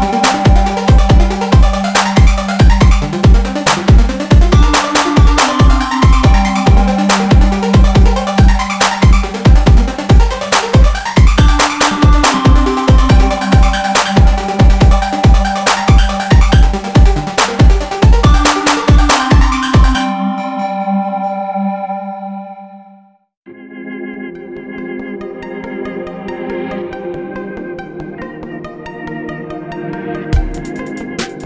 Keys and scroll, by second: 1.2 ctrl+1, 2.9 ctrl+1, 4.5 ctrl+b, 9.6 alt+s, 11.8 ctrl+e, 14.8 alt+s, 16.1 ctrl+1, 19.5 ctrl+e, 29.3 ctrl+r, 29.9 Escape.